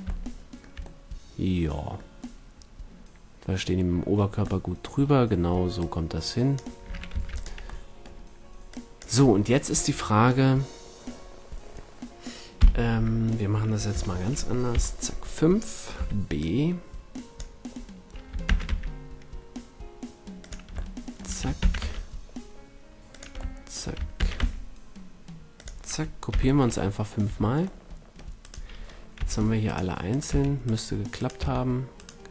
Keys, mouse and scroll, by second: 0.5-1.8 middle drag, 4.6-5.7 middle drag, 5.7-7.8 drag, 7.0 ctrl+s, 8.7-11.6 drag, 12.5 KP_1, 13.8 z, 14.7 KP_5, 15.9 b, 18.4 shift+d, 20.5-22.2 drag, 21.6 shift+d, 23.5-25.6 middle drag, 24.2 shift+d, 26.2 z, 26.9-27.6 drag, 27.2 a, 28.4-29.1 drag, 29.1 g, 29.6 click, 30.2 g, 30.6 drag, 30.9-31.3 drag, 31.3 g.